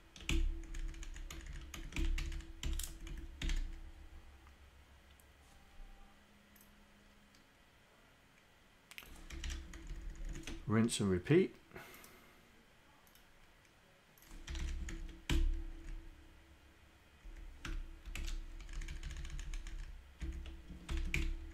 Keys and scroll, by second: 0.3 Delete, 2.2 Up, 2.9 Left, 3.5 Delete, 9.3 Home, 10.2 shift+Down, 14.5 Home, 15.0 shift+Down, 15.3 Delete, 15.9 Down, 17.3 Down, 17.7 Return, 18.3 shift+Insert, 18.7 Up, 19.5 Up, 19.7 Up, 20.3 shift+Down, 20.9 ctrl+Insert.